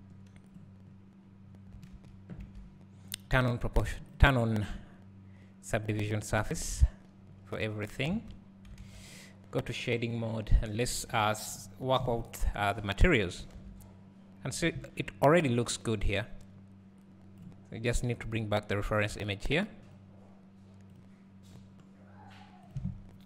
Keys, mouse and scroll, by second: 0.8 click, 2.4 alt+a, 3.9 a, 4.4 click, 7.7 click, 8.1 alt+a, 10.7 click, 13.0 scroll up 1, 20.1-23.2 drag.